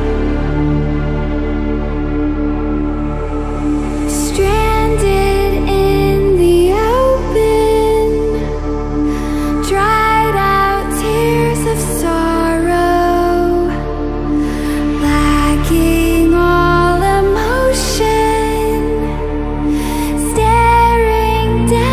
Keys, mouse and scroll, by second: 0.0-2.5 drag, 14.4 ctrl+alt+scroll down 1, 15.5 click, 16.7 ctrl+alt+scroll up 1, 17.3 ctrl+alt+scroll up 1, 17.8-18.4 drag.